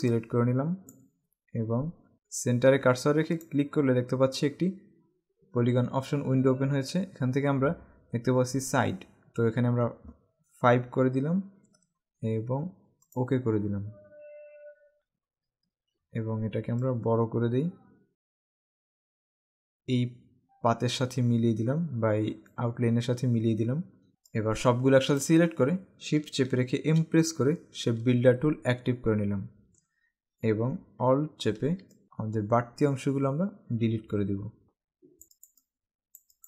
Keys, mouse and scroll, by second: 0.1 click, 3.6 click, 11.1 KP_5, 13.3 click, 15.7 alt+scroll up 1, 16.9 alt+shift+click, 24.4 click, 27.0 shift+m, 36.3 click.